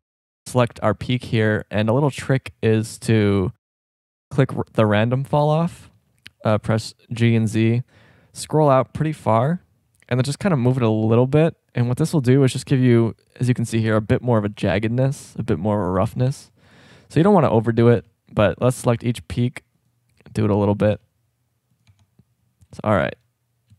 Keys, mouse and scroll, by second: 5.7 shift+scroll up 1, 7.2 g, 12.4 Tab, 14.9-15.4 shift+scroll up 2, 15.3 middle drag, 16.3 Tab, 17.8 g, 18.5 middle click, 20.7 click, 20.8 g, 22.0 Tab, 22.7 drag.